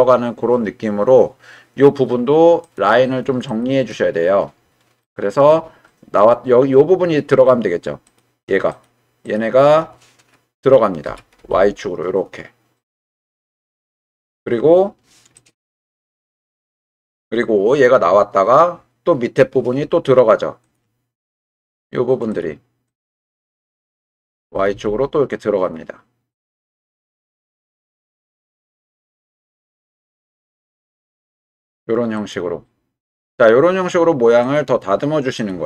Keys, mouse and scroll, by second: 2.6 click, 3.5 click, 3.9 Tab, 5.0 click, 8.1 click, 8.7 shift+click, 9.2 shift+click, 11.0 g, 11.4 y, 15.4 click, 15.8 g, 16.1 y, 16.9 click, 20.7 click, 21.7 shift+click, 22.3 shift+click, 22.9 shift+click, 24.4 g, 24.7 y, 27.7 click, 29.7 shift+click, 30.4 g, 30.6 y, 32.1 click, 34.5 click, 35.3 click.